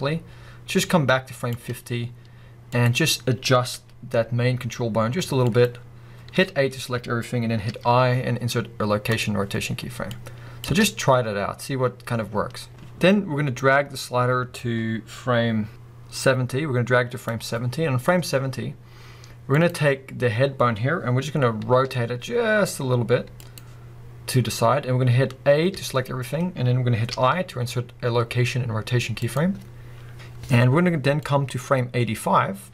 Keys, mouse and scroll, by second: 1.8-2.7 scroll up 1, 2.7 click, 3.8 g, 5.6 click, 6.4 a, 7.6 i, 10.1-19.7 drag, 10.7 space, 12.3 scroll down 2, 17.9-19.6 scroll up 2, 20.2-20.8 scroll down 2, 20.8-21.3 scroll up 2, 21.3-21.8 scroll down 2, 21.8 r, 23.6 click, 25.7 a, 27.1 i, 31.3-32.7 drag.